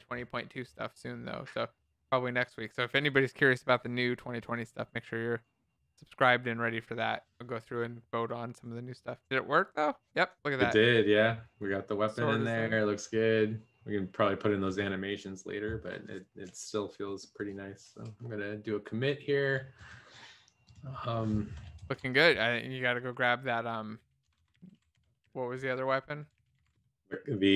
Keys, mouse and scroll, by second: 22.5-27.1 typing.